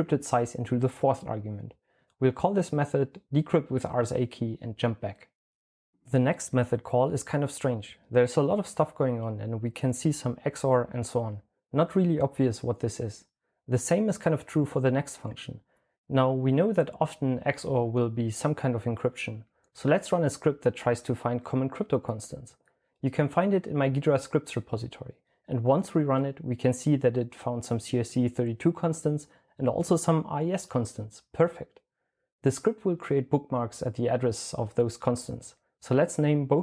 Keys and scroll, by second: 1.2-5.0 typing, 35.5-36.0 typing.